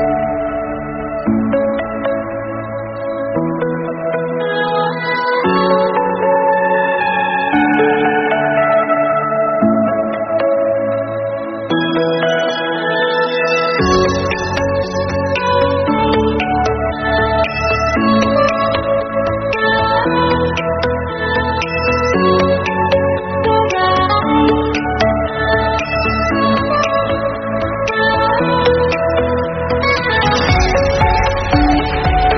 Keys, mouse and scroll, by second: 0.0 click, 0.2 shift+click, 0.4 KP_1, 0.9 e, 3.6 scroll down 2, 3.7 shift+middle click, 4.0-4.6 scroll up 1, 4.6 ctrl+r, 6.6 shift+z, 6.8 click, 7.3 g, 9.0 shift+z, 9.1 middle click, 9.4 scroll up 3, 9.6 shift+middle click, 9.9 click, 10.3 shift+click, 10.5 middle click, 11.0 shift+click, 11.3 middle click, 11.8 shift+click, 12.3 scroll down 1, 12.4 middle click, 12.9-13.3 scroll up 2, 13.3 s, 14.6 click, 14.8 middle click, 15.2 click, 15.4 shift+click, 16.0 click, 16.4 shift+click, 16.6 middle click, 17.3 g, 18.8 middle click, 19.2 click, 19.7 KP_1, 20.2 shift+z, 20.8 shift+click, 22.0 shift+click, 22.8 s, 26.5 shift+z, 26.6 scroll down 4, 26.7 middle click, 27.0-27.7 scroll up 1, 27.7 scroll down 3, 27.7 middle click, 28.3 scroll down 1, 28.5 middle click, 29.0-30.0 scroll up 3, 29.2 shift+middle click, 30.1 click, 30.3 shift+click, 30.6 shift+click, 30.8 KP_3, 31.0 scroll down 1, 31.3 KP_3, 31.5 KP_1, 32.0 e.